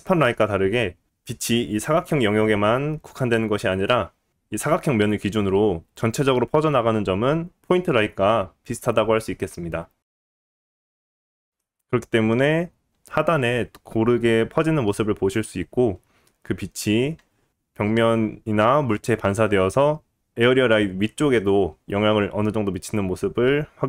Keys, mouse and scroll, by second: 0.5 middle click, 0.7-11.2 drag, 11.2-23.8 middle drag, 11.4 click, 13.1 g, 17.1-17.8 scroll down 1.